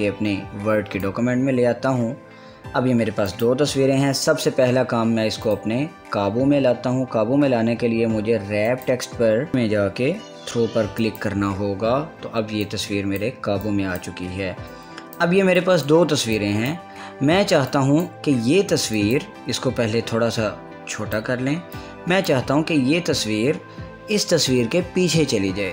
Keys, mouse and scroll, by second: 2.8 scroll down 1, 4.0 click, 6.1 click, 9.4 click, 10.3 click, 11.7-14.6 drag, 15.4-19.6 drag, 20.6-25.2 drag.